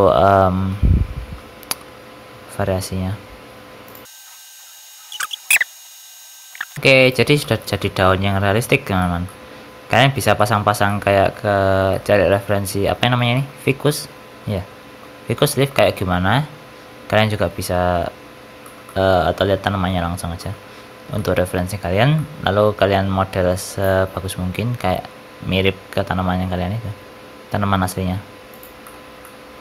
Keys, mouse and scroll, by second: 0.7 o, 1.6 g, 4.1 shift+click, 4.1-4.6 scroll down 3, 4.2 middle click, 4.2 shift+click, 4.3 shift+click, 4.4 shift+click, 4.4 shift+middle click, 4.4-6.4 typing, 4.7 Tab, 4.7 middle click, 4.8 Tab, 5.0 Tab, 5.0 right click, 5.2 Tab, 5.2 shift+middle click, 5.3 middle click, 5.3 scroll up 2, 5.3 shift+middle click, 5.3 Tab, 5.3 middle click, 5.4 click, 5.6 shift+click, 5.7 shift+click, 5.9 middle click, 5.9 Tab, 5.9 scroll down 2, 6.0 shift+middle click, 6.0 click, 6.1 shift+middle click, 6.1 middle click, 6.2 Tab, 6.2 ctrl+s, 6.3 shift+middle click, 6.4 middle click, 6.5 click, 6.5 shift+middle click, 6.6 middle click, 6.6 scroll up 2, 6.7 shift+middle click, 6.9 click, 7.3 shift+middle click, 7.7 middle click, 8.6 scroll up 1, 8.9 shift+middle click, 9.2 middle click, 10.3 shift+middle click, 10.8 middle click, 11.5 scroll up 1, 11.8 shift+middle click, 12.2 middle click, 13.2 shift+middle click, 13.8 middle click, 15.5 shift+middle click, 15.7 middle click, 18.3 scroll down 4, 18.5 shift+middle click, 18.8 middle click, 19.6-19.9 scroll up 2, 20.3 shift+middle click, 20.6 scroll up 2, 21.1 shift+middle click, 22.1 middle click, 24.6-25.1 scroll down 2, 25.7 r, 29.1 middle click.